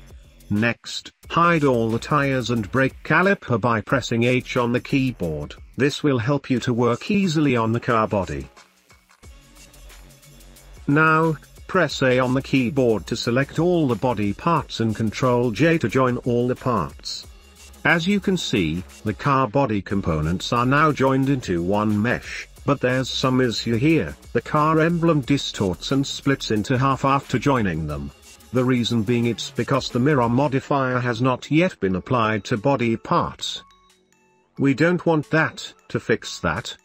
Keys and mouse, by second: 0.0 shift+middle drag, 0.6-1.0 middle drag, 1.8 shift+middle click, 2.5 middle click, 3.8 h, 4.3 middle click, 4.6 h, 5.1 shift+middle click, 5.3 middle click, 5.7 middle drag, 6.1 middle click, 6.1 h, 6.3 h, 6.4 middle click, 6.6 shift+click, 7.1 shift+middle click, 7.5 shift+middle click, 8.3 h, 8.6 h, 8.7 shift+middle click, 9.3 h, 9.6 h, 9.9 shift+middle click, 10.1 shift+middle click, 11.5 middle click, 11.8 a, 12.8-15.0 middle drag, 15.6-16.1 shift+middle drag, 17.1 ctrl+j, 18.2 shift+middle click, 20.7 shift+middle click, 21.2 middle click, 21.6 shift+middle click, 22.2 middle click, 22.6-23.1 shift+middle drag, 23.6 shift+middle drag, 24.3 middle drag, 25.8 middle click, 26.3 shift+middle click, 27.1-27.8 middle drag, 28.7 click, 31.2 click, 31.3 middle click, 31.4 click, 32.2 middle click, 32.3-33.5 drag, 36.4 middle click.